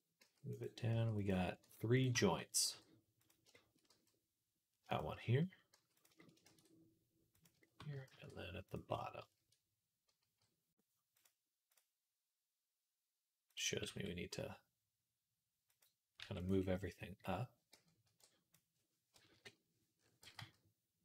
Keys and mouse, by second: 0.1 s, 0.8 s, 1.5 g, 2.0 shift+middle click, 2.5 g, 3.3 shift+middle click, 3.7 g, 5.0 middle click, 5.6 s, 6.3 shift+d, 8.0 shift+d, 10.0 g, 13.3 click, 13.7 g, 16.0-21.0 middle drag, 16.0 g, 17.9 b, 19.1 KP_3, 20.0 g.